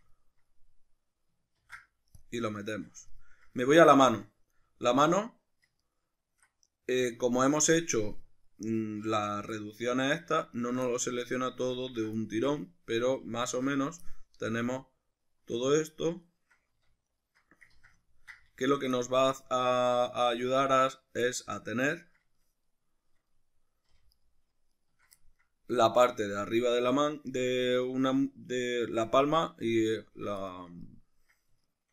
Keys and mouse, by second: 1.6 ctrl+e, 4.8 alt+right click, 5.8 alt+shift+right click, 9.2 alt+shift+right click, 9.6-10.6 middle drag, 10.6 alt+shift+right click, 10.9-11.9 middle drag, 11.9 alt+shift+right drag, 12.3-13.4 ctrl+middle drag, 13.4 alt+shift+right click, 14.1 middle click, 14.7 alt+shift+right drag, 15.2 alt+shift+right click, 15.7 alt+shift+right click, 16.3 alt+shift+right click, 17.1 alt+shift+right click, 17.7 ctrl+z, 18.1-18.7 ctrl+middle drag, 18.7 alt+shift+right click, 19.0-20.5 middle drag, 20.5 alt+shift+right click, 20.9 alt+shift+right click, 21.3-24.1 middle drag, 24.1 alt+shift+right click, 24.7 alt+shift+right click, 25.2-27.3 ctrl+middle drag, 27.3 shift+right click, 27.6 shift+right click, 27.9 right drag, 29.3-31.3 middle drag, 31.7 shift+right click.